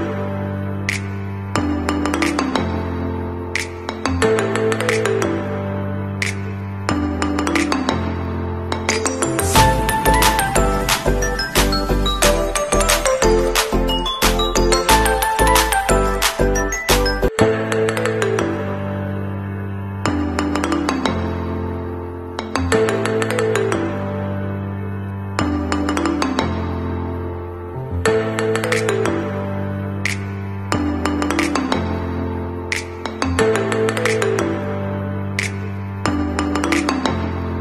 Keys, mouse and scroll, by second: 4.4 alt+click, 5.6 click, 8.3 t, 9.4 click, 10.6 Caps_Lock, 11.2 b, 11.6 o, 12.0 BackSpace, 12.4 i, 13.8-15.0 typing, 16.5 Escape, 18.4 v, 18.6 click, 22.3 KP_1, 22.6 KP_3, 22.8 KP_0, 23.5 Return, 27.2 click, 32.6-33.0 alt+scroll up 2, 33.3 scroll down 1, 34.0 click, 35.3 alt+Right.